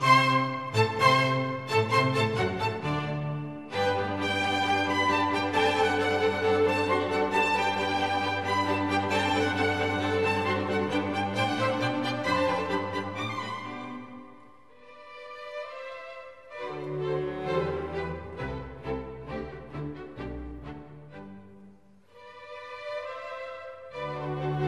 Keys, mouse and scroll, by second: 24.3 typing.